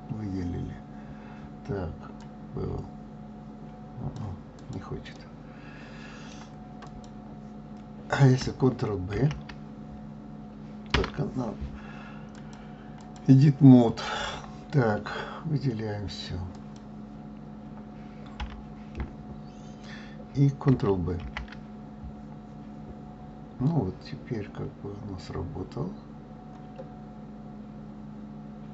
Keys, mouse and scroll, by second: 2.2-4.7 drag, 5.1-6.9 middle drag, 6.9 click, 9.1 ctrl+b, 12.3-15.4 drag, 16.5 click, 18.4 a, 21.1 ctrl+b.